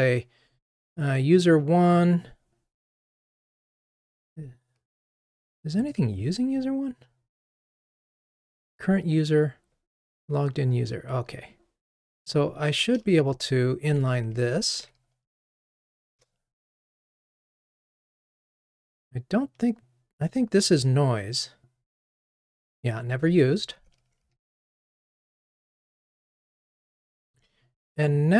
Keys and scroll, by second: 14.8 alt+super+n, 23.7 super+BackSpace, 24.3 ctrl+r.